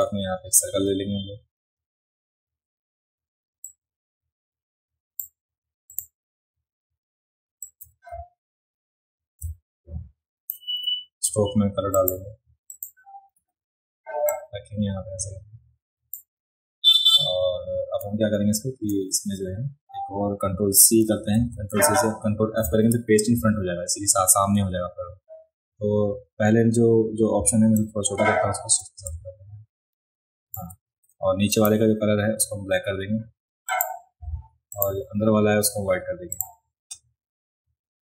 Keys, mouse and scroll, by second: 3.6-5.2 drag, 5.9 click, 7.6-10.5 drag, 11.9 click, 12.7 click, 14.3-16.2 drag, 21.0 ctrl+c, 21.4 ctrl+c, 21.6 ctrl+c, 22.6 ctrl+f, 27.8-30.5 shift+drag, 31.5 click, 33.7 click, 34.7 click, 36.3 click.